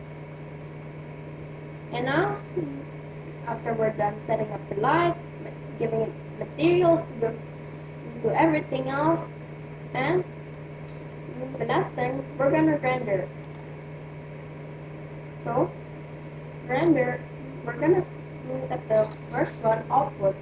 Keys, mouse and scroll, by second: 7.9-11.3 middle drag, 11.3-14.8 drag, 14.8-20.4 middle drag.